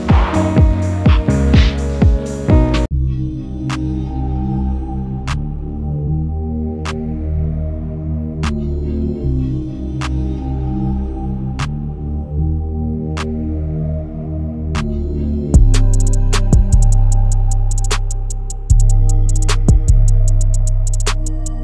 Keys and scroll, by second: 10.2 Caps_Lock.